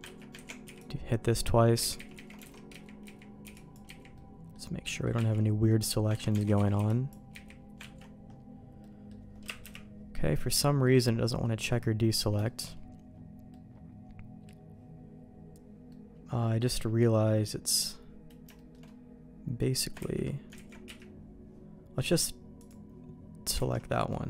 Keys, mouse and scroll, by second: 0.0 ctrl+q, 0.4 ctrl+x, 0.6 b, 1.9 ctrl+z, 2.1 ctrl+z, 2.4 alt+a, 2.7 z, 3.0 z, 3.4 b, 3.8 z, 4.1 middle click, 4.8 middle click, 5.2 ctrl+q, 5.6 middle click, 6.1 ctrl+q, 6.3 alt+a, 6.5 z, 6.7 b, 7.3 z, 7.8 ctrl+q, 8.8 middle click, 9.6 KP_Decimal, 10.1 middle click, 11.4 middle click, 12.4 shift+middle click, 13.5 middle click, 15.8 middle click, 16.9 middle click, 17.7 middle click, 18.5 shift+middle click, 20.0 ctrl+x, 20.5 ctrl+z, 20.8 q, 22.0 click, 23.6 alt+a, 23.9 middle click.